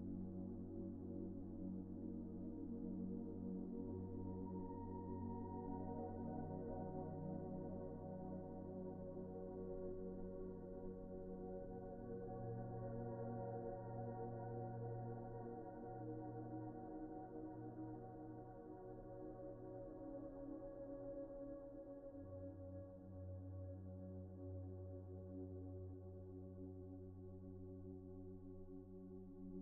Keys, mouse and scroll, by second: 0.3 Tab, 1.8-2.2 typing, 4.9 middle click, 8.2 alt+a, 10.1 middle click, 12.1 middle click, 12.6 shift+middle click, 15.2 alt+shift+click, 15.6 middle click, 19.6 alt+a, 20.1 alt+shift+click, 20.4 middle click, 20.9 scroll down 1, 21.3 middle click, 24.6 a, 25.9 double click, 26.4-26.9 scroll up 1, 26.9 middle click, 27.2-28.7 scroll up 1.